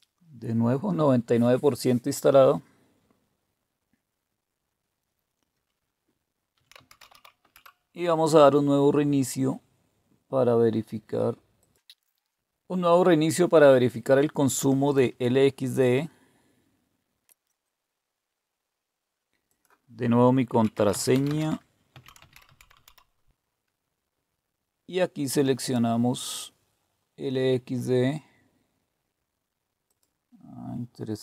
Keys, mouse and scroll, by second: 6.3-7.5 typing, 11.6 click, 12.3 click, 17.2 Return, 19.4 click, 20.3-23.3 typing, 25.6 click, 29.9 click.